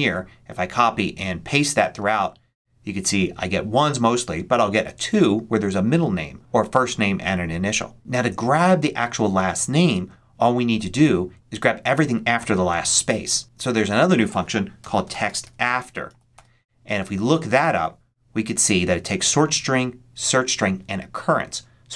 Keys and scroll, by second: 1.9 super+v, 14.5-15.4 typing.